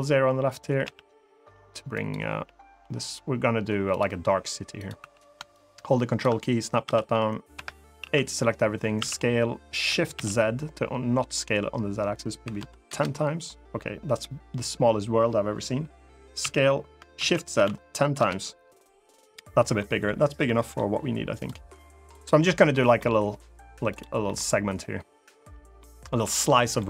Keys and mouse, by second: 0.6 g, 1.7 click, 3.6 click, 3.6 g, 4.5 click, 4.7 3, 5.3 ctrl+click, 6.6 s, 7.3 Escape, 7.7 a, 8.7 s, 9.9 shift+z, 12.2 1, 12.3 0, 12.6 Return, 16.1 s, 16.9 shift+z, 17.3 1, 17.4 0, 17.9 Return, 19.5 middle click, 20.2 middle click, 21.9 click, 22.3 middle click, 23.6 click, 24.0 middle click, 25.5 middle click, 26.5 middle click.